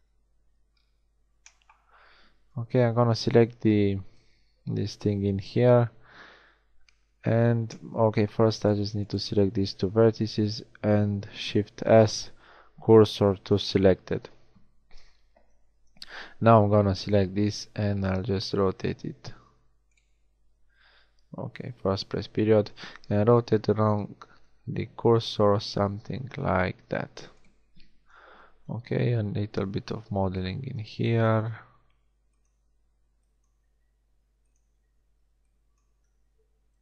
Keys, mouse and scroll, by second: 2.7 b, 11.3 shift+s, 15.0 KP_1, 16.2 b, 18.4 r, 21.9 ., 23.0 r, 28.2 b, 29.4 g, 30.6 a, 31.4 b, 31.4 g, 32.5 a, 32.5 b, 33.7 g, 35.0 a, 35.0 b, 35.9 g.